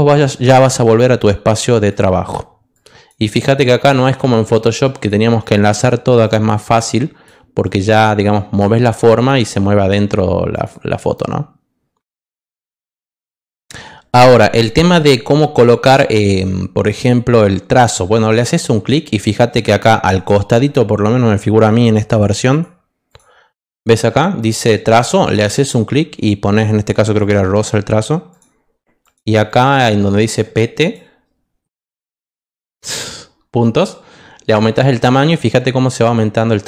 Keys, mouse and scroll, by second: 1.8 click, 2.7 click, 3.5 click, 4.1 click, 4.8 click, 5.4 click, 6.2 click, 6.9 click, 7.6 click, 8.3 click, 8.9 click, 10.5 click, 16.9 click, 25.2 click, 27.2 click, 28.3 click, 29.0 click, 29.4 click, 29.7 click, 30.2 click, 30.8 click.